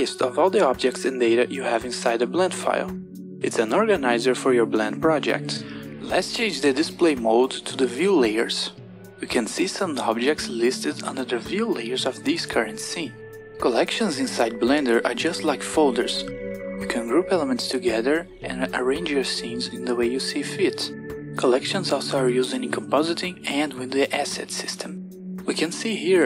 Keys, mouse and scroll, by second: 9.4-10.6 drag.